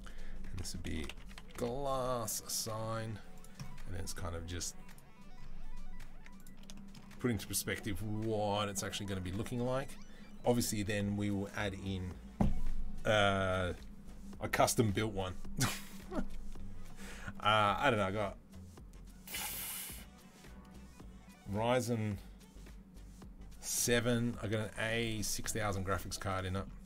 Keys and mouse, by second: 1.3 s, 2.8-5.4 right drag, 2.9 z, 5.4 middle click, 6.2 Tab, 6.2 right click, 6.3-26.8 shift+middle drag.